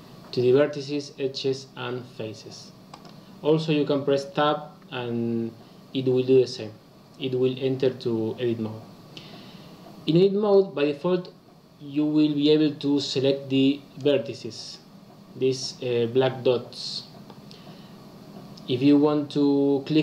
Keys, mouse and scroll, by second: 10.4 click.